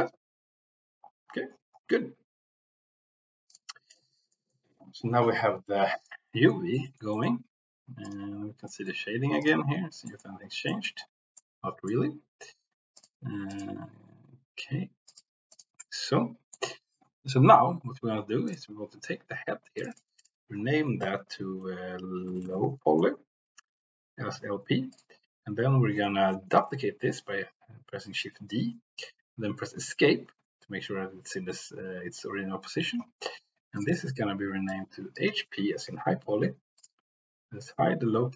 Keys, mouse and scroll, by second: 0.0 g, 3.4 click, 3.8 click, 4.2 middle click, 6.2 middle click, 6.9 middle click, 8.0 drag, 8.7 middle click, 10.2 middle click, 10.7 middle click, 11.3 middle click, 15.5 click, 15.8 middle click, 18.4 click, 19.7 click, 20.0-23.8 drag, 24.8 click, 25.5 g, 26.0 Escape, 26.5 shift+d, 29.7 Escape, 33.7-36.9 drag.